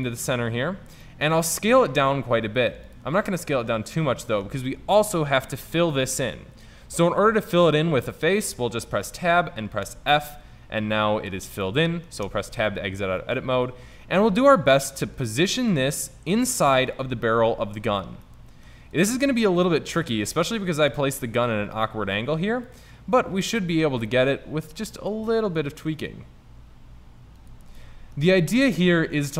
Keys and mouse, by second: 0.4-1.1 middle drag, 1.6 s, 3.5 middle click, 8.9 Tab, 9.9 f, 12.3 Tab, 14.2 s, 18.4-20.7 middle drag, 20.7 click, 23.6-25.1 middle drag, 25.6 r, 27.9-28.5 middle drag, 28.5 r.